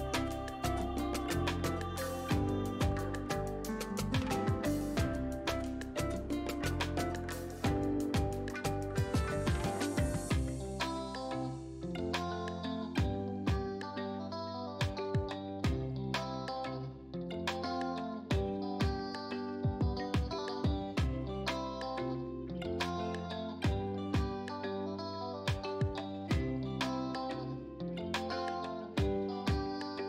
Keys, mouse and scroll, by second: 0.6 ctrl+a, 1.2 click, 4.2 click, 6.7 click, 11.5 ctrl+t, 12.5-24.1 drag, 25.4 v, 26.9-29.1 drag.